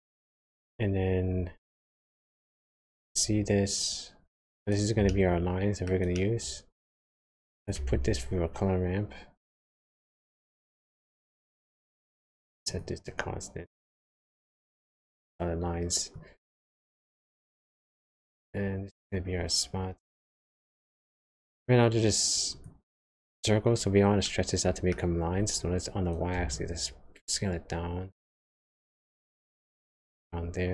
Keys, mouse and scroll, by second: 2.7 ctrl+shift+click, 5.1 shift+middle click, 7.6 click, 7.9 shift+a, 12.6 click, 16.1 click, 24.2 middle click, 26.5 shift+click.